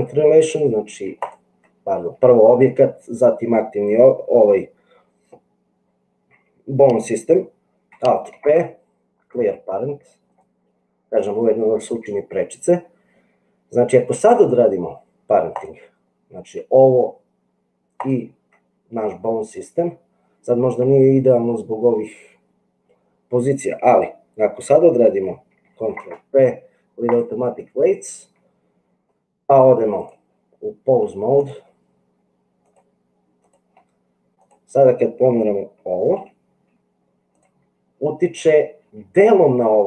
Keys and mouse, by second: 0.3 click, 8.3 alt+p, 17.9 shift+click, 26.0 ctrl+p, 32.7 click, 34.3 click, 36.3 g.